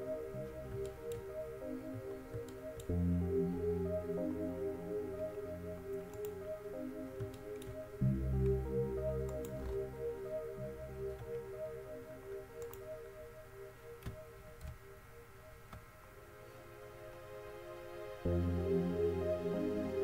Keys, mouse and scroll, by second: 0.0-1.0 middle drag, 1.1-2.1 middle drag, 2.2-2.8 middle drag, 2.9-6.4 middle drag, 7.6-11.3 middle drag, 11.3 Tab, 12.8-14.8 drag, 14.9 ctrl+c, 18.0-20.0 drag.